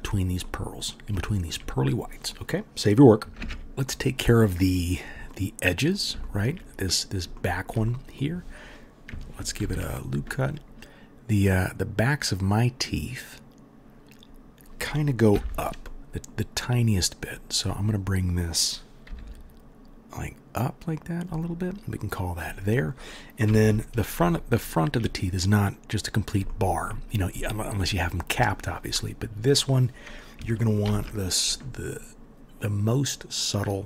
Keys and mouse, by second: 3.4 ctrl+s, 9.6 ctrl+r, 15.3 2, 17.2 middle click, 17.2 right click, 19.0 g, 23.4 KP_1, 30.8 ctrl+r.